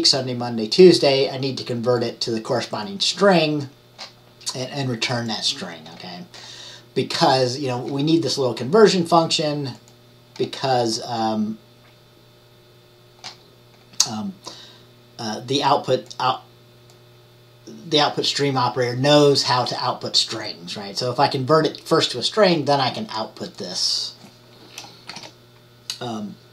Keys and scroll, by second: 25.2 ctrl+shift+@.